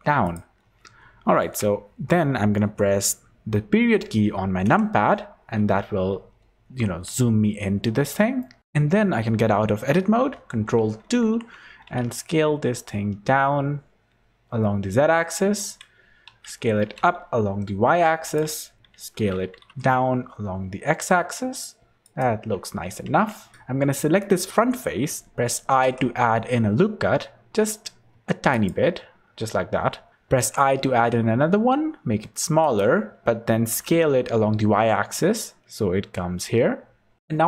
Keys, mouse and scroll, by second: 0.5-0.9 scroll up 10, 4.6 KP_Decimal, 5.5-6.1 scroll down 5, 6.4 scroll up 2, 7.5 scroll down 1, 7.6 scroll down 1, 8.3 shift+middle click, 8.6 Tab, 10.4 ctrl+2, 11.2 Tab, 11.8 s, 16.2 s, 18.9 s, 23.0 Tab, 23.5 Tab, 23.5 click, 23.5 3, 25.8 i, 29.7-30.4 scroll up 2, 30.4 i, 33.5 s.